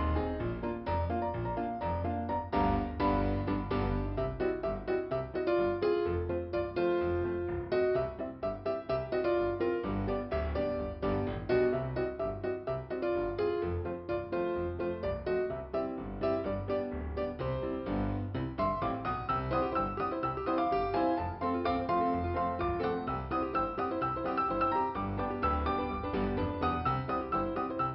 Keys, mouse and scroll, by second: 5.4 scroll up 2, 9.3 click, 10.9 click, 11.6 click, 13.3 click, 13.8 click, 14.5 click, 18.0 click, 18.1 click, 19.7 click, 20.8 click, 24.2 scroll down 2, 26.1 click, 27.1 click.